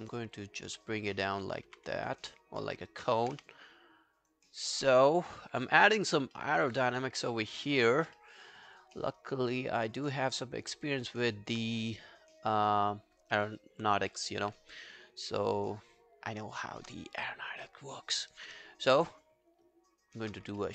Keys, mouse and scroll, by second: 1.9 w, 2.1 alt+click, 2.6 alt+middle click, 2.9 alt+right click, 3.4 q, 5.4-5.9 alt+scroll down 1, 6.0 alt+click, 6.4 alt+middle click, 6.6 alt+right click, 6.9 alt+click, 7.2 alt+middle click, 7.6 alt+click, 8.2 alt+middle click, 8.4 alt+right click, 8.6 alt+click, 9.0 alt+middle click, 9.2 alt+right click, 9.9 alt+middle click, 10.1 alt+right click, 10.4 alt+middle click, 10.7 alt+right click, 10.9 alt+click, 11.2 alt+right click, 13.2 right click, 13.4 alt+middle click, 13.6 alt+right click, 13.8 alt+click, 14.1 alt+middle click, 14.7 right click, 19.1 shift+right click, 20.6 alt+middle click.